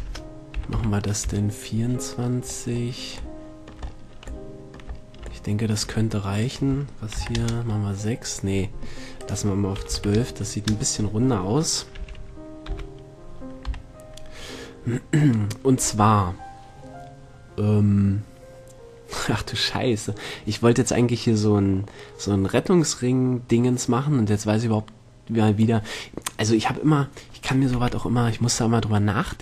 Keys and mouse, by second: 0.5 BackSpace, 3.3-3.7 drag, 6.9-8.7 drag, 9.7-11.4 drag, 12.4 t, 13.1 KP_7, 14.1 KP_Decimal, 15.1 middle click, 29.0-29.4 middle drag.